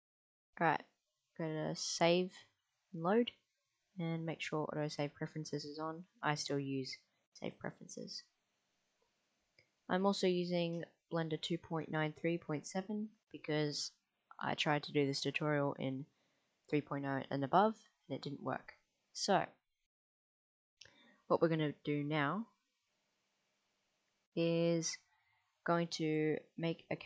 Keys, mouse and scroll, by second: 21.2-25.3 middle drag.